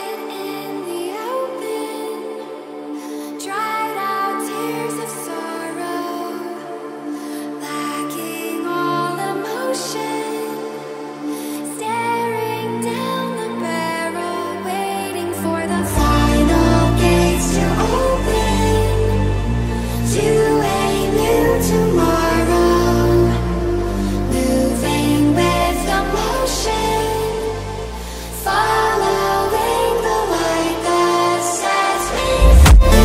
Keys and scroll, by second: 17.3 c.